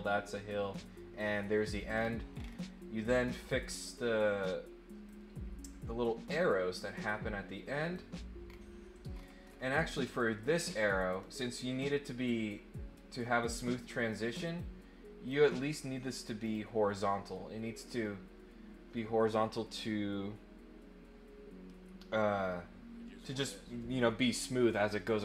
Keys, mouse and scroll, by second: 1.9 scroll down 2, 2.3 scroll up 2, 3.3 click, 5.0-7.9 drag, 8.4 scroll down 1, 9.1-9.8 scroll up 3, 14.5 click, 16.4 click.